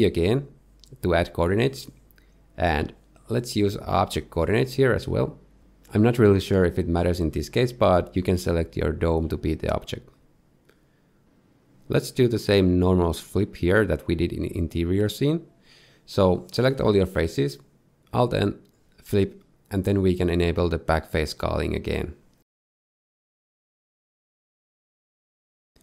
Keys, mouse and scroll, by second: 0.6 ctrl+t, 1.3 shift+middle click, 2.0-3.1 scroll up 2, 3.1 click, 4.9 click, 9.6 middle click, 10.3 scroll down 1, 10.6 shift+middle click, 10.8 middle click, 11.9 z, 14.3 Tab, 15.0 a, 17.3 alt+n, 20.0 Tab, 20.3 shift+middle click, 21.3 click, 23.1 middle click, 23.4 shift+middle click, 24.0 middle click.